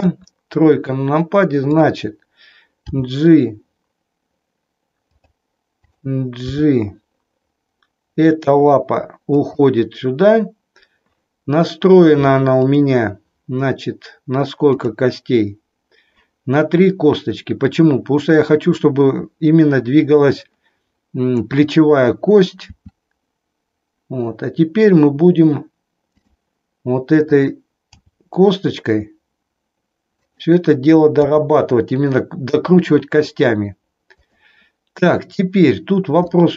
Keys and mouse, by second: 1.7 click, 2.8 g, 5.9 click, 7.1 g, 9.5 click, 12.7 click, 14.7 click, 22.7 r, 28.3 g, 30.3 click, 31.2 r, 34.2 click, 36.2-36.5 middle drag.